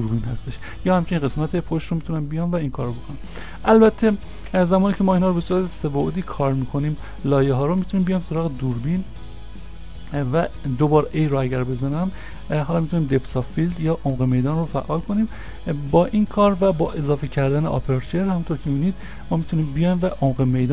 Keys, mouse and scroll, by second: 4.5 Delete, 5.6 ctrl+a, 11.2 a, 18.8 a, 18.8 scroll down 1, 19.5 middle click.